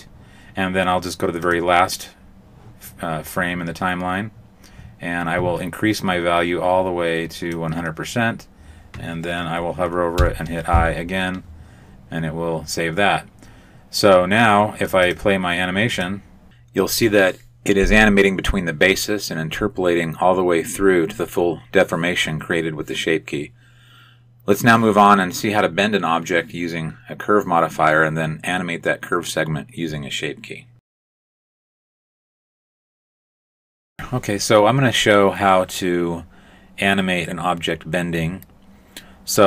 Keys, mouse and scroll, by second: 1.4 click, 6.0 click, 10.2 i, 15.0 click, 15.9 click, 22.2 middle click.